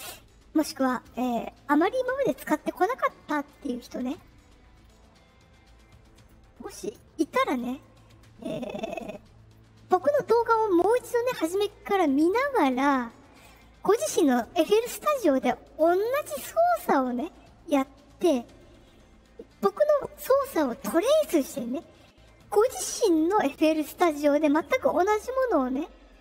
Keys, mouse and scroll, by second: 3.1 middle click, 3.1-3.5 scroll up 2, 6.1 right click, 6.8 click, 7.5 right click, 13.3 click.